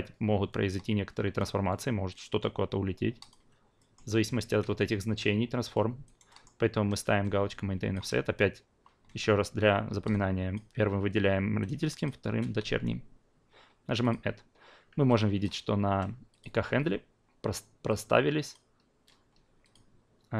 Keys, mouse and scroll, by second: 3.2 click, 3.8 alt+middle click, 6.2 alt+right click, 6.4 alt+middle click, 7.2-12.3 alt+drag, 14.0 click, 15.1 alt+click, 16.3 click, 17.9-18.5 drag, 19.6 click.